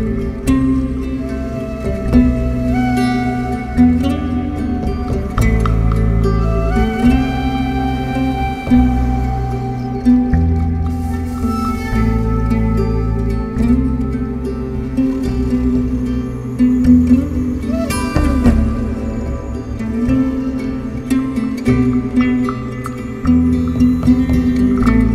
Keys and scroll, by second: 0.1 Escape, 2.5 4, 7.5 3, 9.8 ctrl+F1, 10.7 ctrl+F2, 11.8 ], 13.7 ctrl+z.